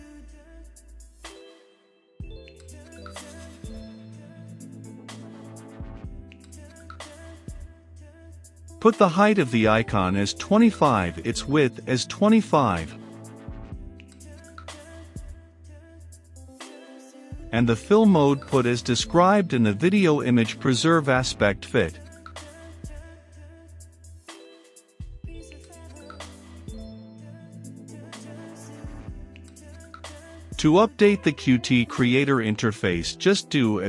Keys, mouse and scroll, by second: 0.0-4.7 typing, 0.1 Return, 1.1 Return, 2.2 Return, 3.2 Return, 4.3 Return, 4.9 Return, 5.8-7.6 drag, 7.6 Return, 8.3 h, 8.4 e, 8.6 i, 9.6 Return, 11.8 w, 12.0 i, 12.6 d, 13.2 Return, 16.8 f, 16.9 i, 17.0 l, 17.6 Return, 19.3-21.2 typing, 23.0 Down, 23.3 Return, 24.5-33.8 drag.